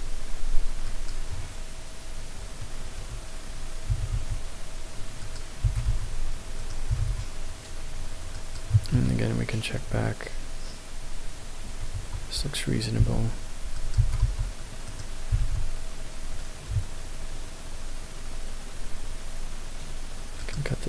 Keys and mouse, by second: 1.0 click, 3.9 s, 4.2 x, 5.2 click, 5.7 g, 5.9 y, 6.6 right click, 6.9 g, 7.1 x, 8.4 click, 8.9 KP_0, 12.0 Tab, 13.0 ctrl+r, 14.1 g, 14.3 y, 14.9 right click, 15.3 g, 15.5 x, 20.4 click.